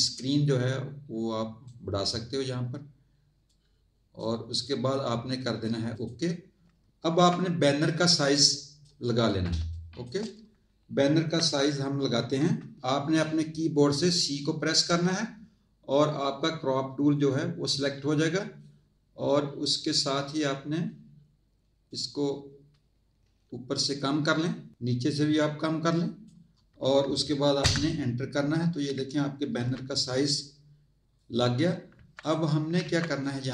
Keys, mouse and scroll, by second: 0.1 click, 3.4 click, 5.3 click, 7.9 click, 9.6 space, 9.7 click, 14.9 c, 21.9 click, 27.6 Return, 30.3 click, 31.9 z, 32.2 click, 32.8 z, 33.2 click.